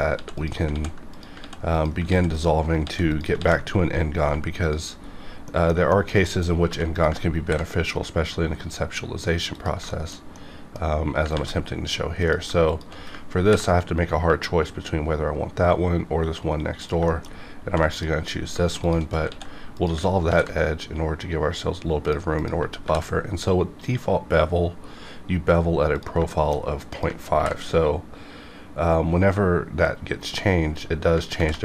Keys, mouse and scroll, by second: 0.1 ctrl+x, 0.3 ctrl+click, 0.7 ctrl+x, 1.1 click, 1.4 ctrl+x, 1.7 click, 2.1 ctrl+x, 2.3 click, 2.8 ctrl+x, 3.1 ctrl+click, 3.4 ctrl+x, 4.2 1, 4.6 click, 4.9 scroll down 1, 5.5 middle click, 6.5 scroll up 1, 6.6 2, 6.9 click, 7.4 ctrl+b, 8.4-9.5 scroll down 1, 9.5 click, 9.9 shift+middle click, 11.3 ctrl+z, 12.2 click, 12.7 shift+click, 13.4 ctrl+b, 16.8 click, 17.1 shift+middle click, 17.3 shift+scroll up 2, 17.6 2, 17.9 click, 18.4 scroll down 1, 18.8 shift+click, 19.3 ctrl+x, 19.7 click, 20.3 ctrl+b, 22.0 click, 22.8 ctrl+b, 24.9-25.9 scroll up 1, 25.9 click, 26.3 shift+middle click, 26.9 click, 27.3 ctrl+b, 30.1 right click, 30.7 click, 31.3 ctrl+b.